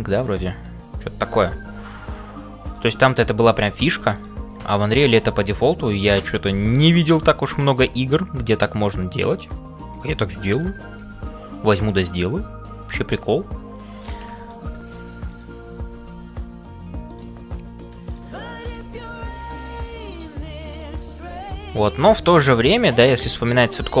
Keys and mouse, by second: 0.0-24.0 typing, 2.2 middle click, 3.4 middle click, 4.6 middle click, 5.8-7.0 middle drag, 8.9 middle click, 10.4 middle click, 12.1-14.1 middle drag, 14.3 shift+middle click, 14.7 middle click, 15.3 click, 18.1 click, 21.7 middle click, 22.1 click, 23.7 shift+middle click.